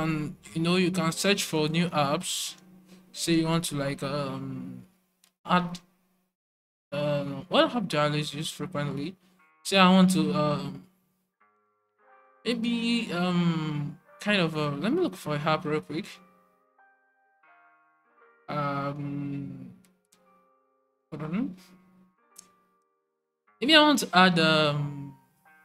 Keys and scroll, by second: 2.0-3.4 typing, 6.7 typing, 12.9 typing, 17.9 typing, 21.0 typing.